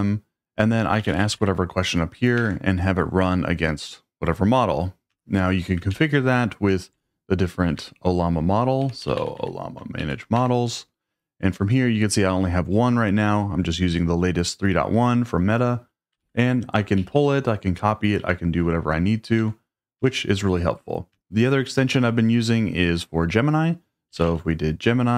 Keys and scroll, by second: 0.7-1.8 typing, 2.4 alt+BackSpace, 5.1 BackSpace, 5.9 super+k, 7.8 Escape, 8.6-9.9 typing, 10.0 Down, 10.4 Return, 16.2 super+k, 17.0 Down, 18.2 Up, 19.4 Escape, 20.0 BackSpace, 21.1 BackSpace, 23.9-24.7 typing.